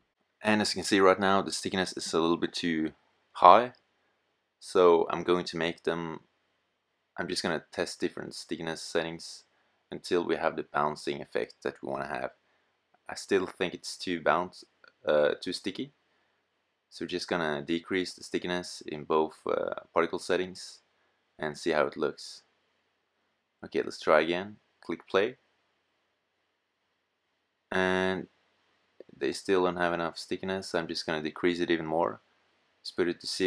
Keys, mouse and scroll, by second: 2.8 middle click, 5.0-6.3 middle drag, 9.7 middle click, 15.5 click, 21.1-22.4 middle drag, 26.0 middle click, 32.0 middle click.